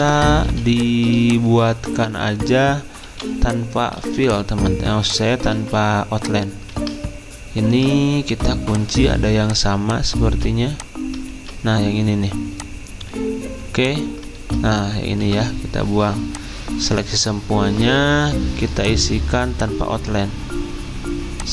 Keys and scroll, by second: 0.0 ctrl+z, 3.0 v, 4.0 ctrl+z, 5.5 ctrl+z, 6.7 ctrl+z, 15.2 Delete.